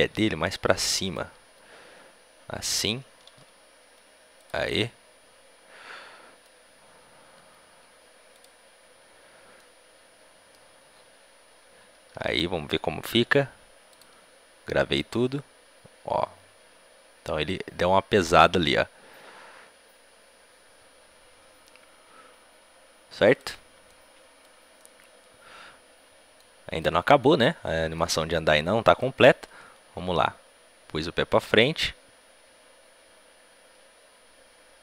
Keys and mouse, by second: 0.2 g, 1.3-3.2 right drag, 1.3 g, 3.2-6.3 drag, 3.2 s, 7.3 g, 8.1 middle click, 9.5 click, 12.0 a, 12.2 a, 13.9 i, 14.9-16.5 drag, 23.9 click, 24.3-28.9 middle drag, 28.9-30.6 drag.